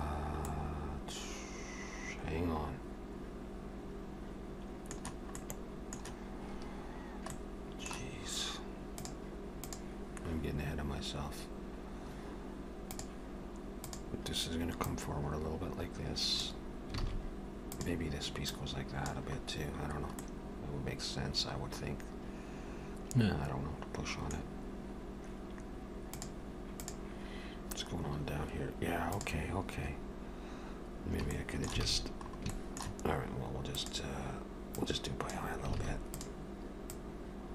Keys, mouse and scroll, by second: 0.5 middle click, 5.3 middle click, 7.3 middle click, 13.9 click, 14.9 click, 17.1 alt+a, 17.8 click, 18.5 click, 19.4-20.1 scroll down 2, 20.2 middle click, 24.5-26.3 scroll down 1, 31.3 shift+middle click, 31.9 alt+a, 32.3 scroll up 2, 32.5 shift+middle click, 33.8 click, 34.8 click, 35.8 alt+a, 36.2 click, 36.9 click.